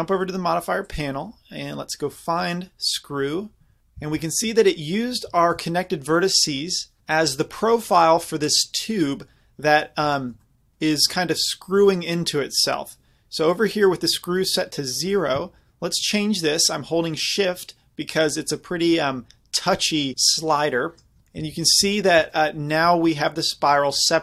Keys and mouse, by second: 4.0 z, 4.8-7.0 middle drag, 10.1-13.6 middle drag, 15.1-17.9 drag, 21.4 z, 21.6-24.2 middle drag.